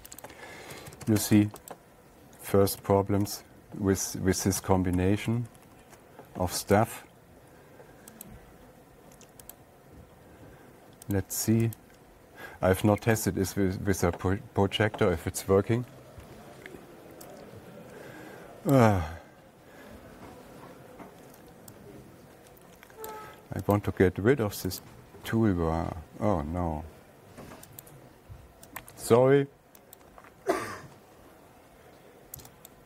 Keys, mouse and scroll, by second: 0.4 click, 0.7 click, 1.2 Escape, 1.3 Escape, 1.5 Escape, 1.6 Escape, 1.9 Escape, 2.2 click, 3.3 alt+Tab, 5.0 alt+Tab, 5.4 alt+Tab, 5.8 alt+Tab, 6.0 alt+Tab, 6.2 alt+Tab, 7.2 click, 8.7 click, 10.1 click, 19.2 click, 23.5 click, 24.2 click, 25.3 click, 29.3 click, 30.5 right click.